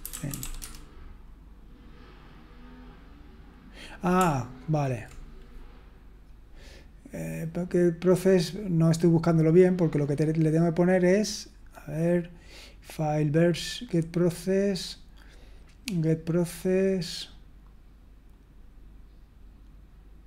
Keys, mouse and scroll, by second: 0.3-1.1 typing.